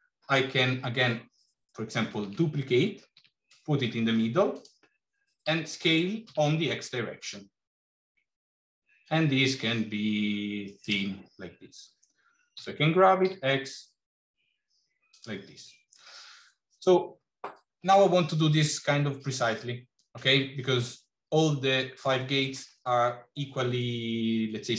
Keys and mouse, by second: 1.9 shift+d, 5.3 s, 12.4 g.